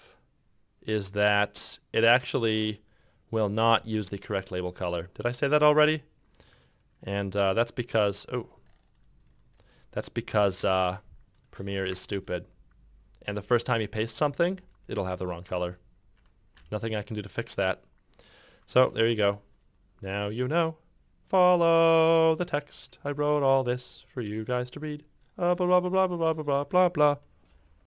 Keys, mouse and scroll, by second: 3.7 f, 5.5-6.4 typing, 10.7 ctrl+v, 11.9 ctrl+v, 19.1 ctrl+F6.